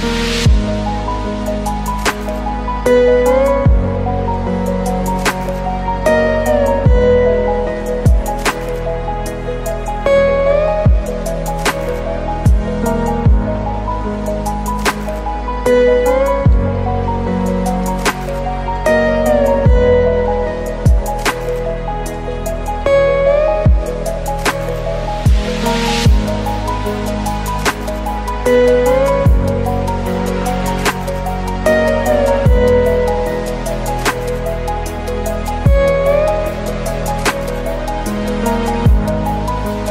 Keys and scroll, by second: 3.4 ctrl+z, 5.8 ctrl+space, 8.6 ctrl+g, 16.5 ctrl+z, 25.8 ctrl+i, 34.5 ctrl+0.